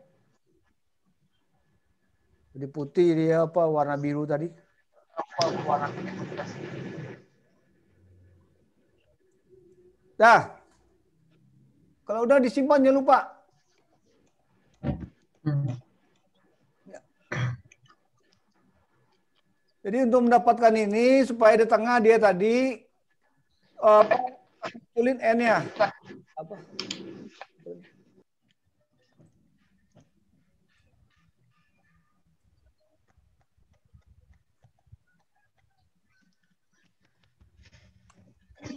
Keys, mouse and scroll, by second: 16.0 click, 19.9 click, 19.9-20.5 scroll up 4, 20.7-21.0 scroll down 2, 25.6 n, 28.7 click, 29.4 click, 30.9 click, 35.3 n.